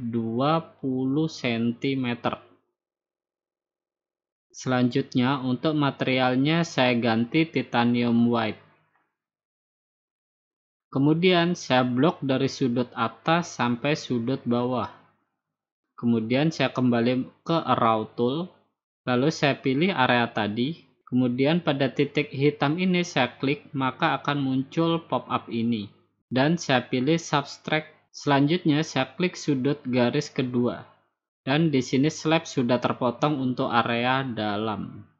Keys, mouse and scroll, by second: 1.9 BackSpace, 3.8-5.9 typing, 6.7-7.9 drag, 8.6-10.1 drag, 10.2-11.3 drag, 12.9-14.0 drag, 15.3-16.3 drag, 16.9-18.0 drag, 18.3-19.4 drag, 21.3-22.4 drag, 24.8-25.9 drag, 26.3-27.4 drag, 28.7-29.8 drag, 30.7-31.8 drag, 33.3-34.4 drag.